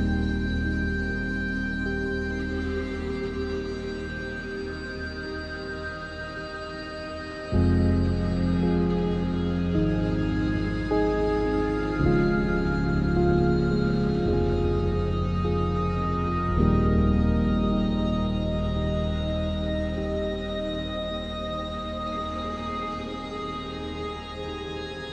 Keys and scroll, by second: 10.3 1, 12.4 r, 19.8 ctrl+z, 21.1 a, 21.7 a, 22.8 ctrl+z, 23.3 3, 24.4 Tab.